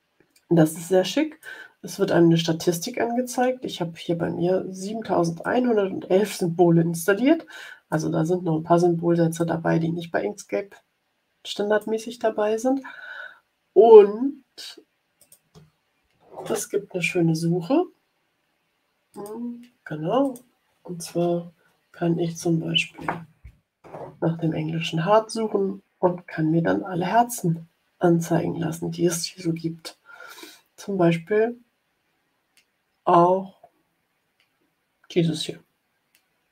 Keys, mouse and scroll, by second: 5.3-8.0 drag, 9.3-11.9 drag, 15.1 click, 16.4 click, 19.1 click, 20.1 click, 21.7-23.4 typing.